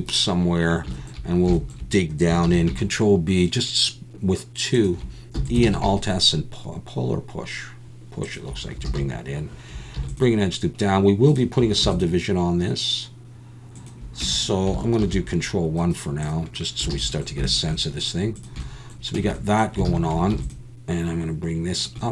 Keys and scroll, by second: 2.5 ctrl+b, 5.4 e, 5.6 alt+s, 8.9 alt+a, 9.9 ctrl+r, 11.8 ctrl+r, 14.2 Tab, 15.0 ctrl+1, 16.9 alt+a, 19.1 Tab, 19.8 alt+a, 20.3 ctrl+r.